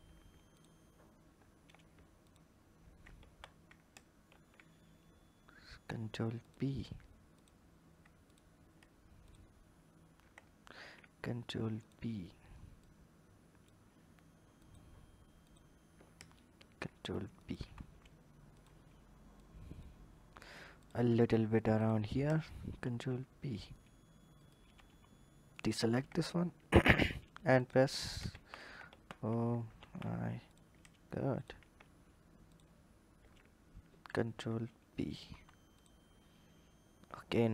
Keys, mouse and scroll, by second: 0.3 shift+click, 2.0 shift+click, 3.0 ctrl+z, 4.0 ctrl+b, 7.1 click, 8.0 click, 9.0 ctrl+click, 10.5 ctrl+b, 12.7 click, 14.4 alt+click, 15.2 alt+click, 16.4 ctrl+b, 17.4 Tab, 18.0-18.3 scroll down 2, 18.3 drag, 19.2 click, 19.9-20.6 scroll up 2, 20.6 click, 20.9 Tab, 21.6 alt+click, 22.7 ctrl+b, 25.3 shift+click, 26.4 ctrl+b, 28.1 ctrl+z, 28.6 ctrl+z, 30.3 click, 31.1 ctrl+click, 32.3 shift+click, 33.7 ctrl+b, 35.1 Tab, 35.5 click, 35.9 scroll down 2, 37.1 click.